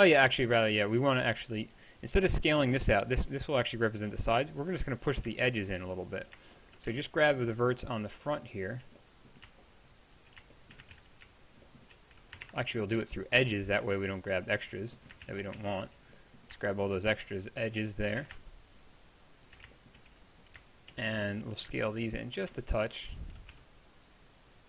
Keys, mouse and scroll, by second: 2.4-8.5 middle drag, 11.0 ctrl+z, 12.5 ctrl+Tab, 15.3 ctrl+z, 21.8-23.4 drag, 23.4 right click, 23.4 s, 23.5-24.6 middle drag.